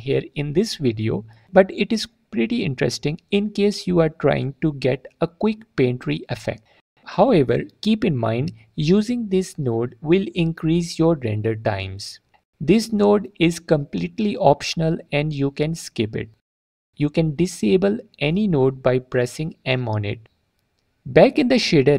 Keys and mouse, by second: 0.1 click, 1.1 alt+drag, 2.2 click, 2.9-6.6 drag, 6.9 click, 7.9 drag, 8.2 click, 10.8 click, 11.7-12.1 drag, 13.0 click, 13.9 m, 15.6 middle click, 17.2 click, 17.5 alt+click, 19.4-20.0 drag, 21.1-21.7 drag.